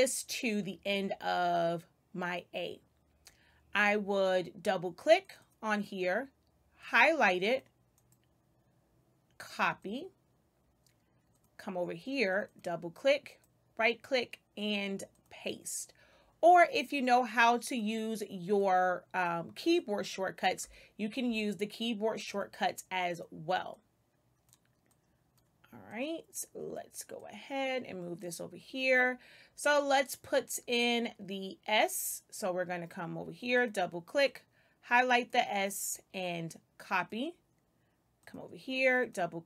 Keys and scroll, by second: 20.5 space.